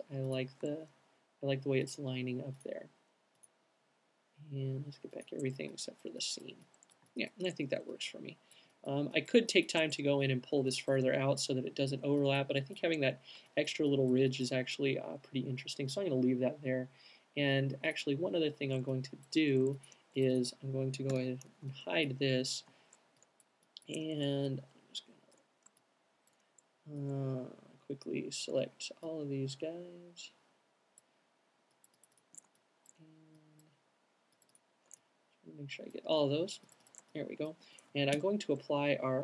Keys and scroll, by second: 20.3 alt+h, 23.3 alt+shift+h, 38.2 alt+shift+m.